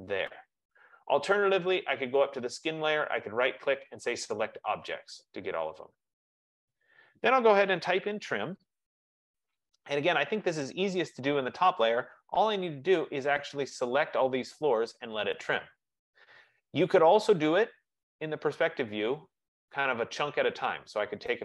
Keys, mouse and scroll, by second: 0.1 click, 3.1 right click, 6.2 click, 7.9-9.0 typing, 11.3 typing, 16.3 click, 18.1 click, 18.6 click.